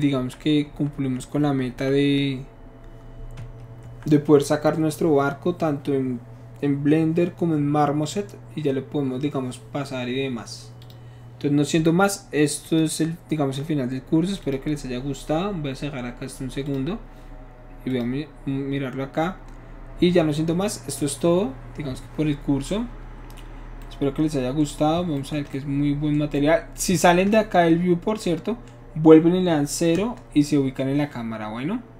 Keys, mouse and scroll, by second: 0.1 Left, 0.6 Right, 0.9 Left, 1.3 Right, 1.7 Left, 3.3 Right, 3.8 click, 10.8 click, 12.6 click, 14.4 click, 16.6 click, 17.9 click, 30.0 KP_0.